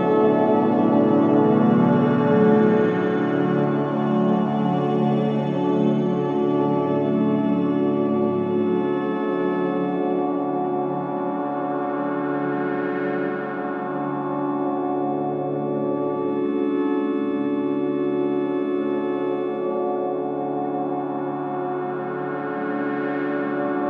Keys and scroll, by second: 5.2 4.